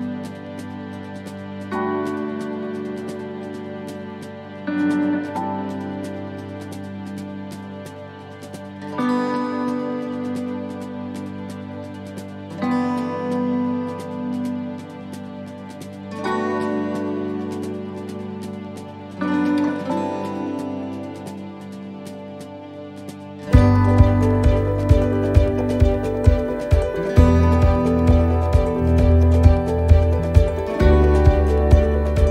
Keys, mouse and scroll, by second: 0.2 middle click, 1.1 click, 5.1 middle click, 5.3 scroll down 1, 6.0 scroll down 4, 6.1 shift+middle click, 6.7 middle click, 8.2-8.7 scroll down 2, 8.5 middle click, 9.7 click, 11.1 middle click, 15.0-15.3 scroll down 1, 17.3 middle click, 17.3 scroll down 4, 18.0-18.8 scroll up 6, 18.8 middle click, 19.5 right click, 20.8 click, 22.4 right click, 23.7 l, 28.7 click, 31.7 shift+middle click.